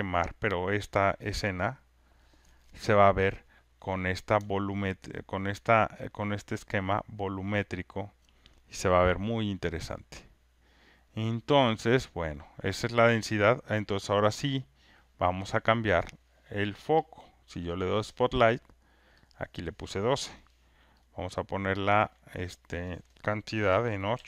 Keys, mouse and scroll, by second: 8.2-11.1 alt+drag, 17.1 click, 19.5 click, 21.1 click, 22.3 click.